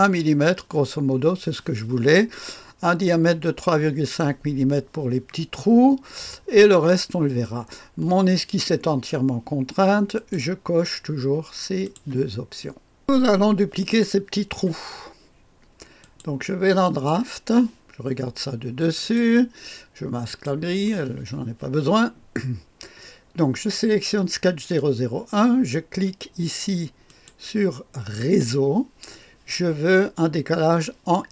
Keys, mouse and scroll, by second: 5.6-10.1 scroll down 2, 10.1 click, 11.8 click, 13.0 click, 16.0 click, 16.8 click, 18.9 click, 20.2 click, 27.0 click, 28.1 click.